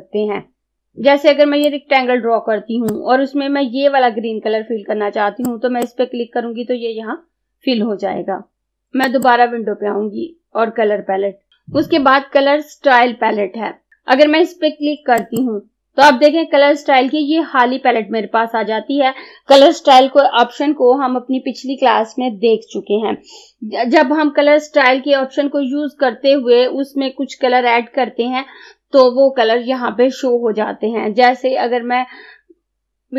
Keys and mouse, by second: 0.8-5.5 drag, 5.6-8.5 drag, 9.2 click, 15.2 click.